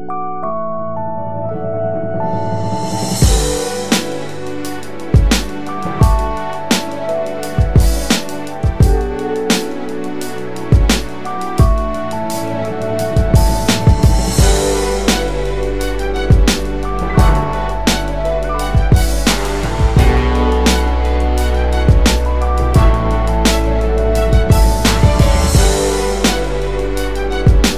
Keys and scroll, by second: 0.1 space, 0.2 space, 1.9 space, 2.1 space, 27.3 space.